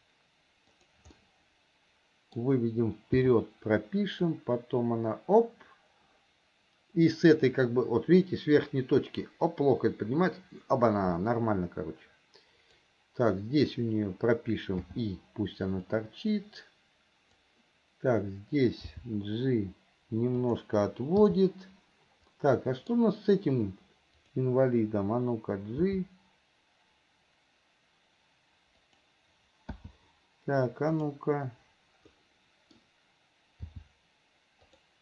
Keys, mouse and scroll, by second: 1.4-2.6 middle drag, 4.5-13.1 drag, 16.1-17.6 drag, 22.5 middle click, 24.4 click, 31.2 click, 32.4 middle click.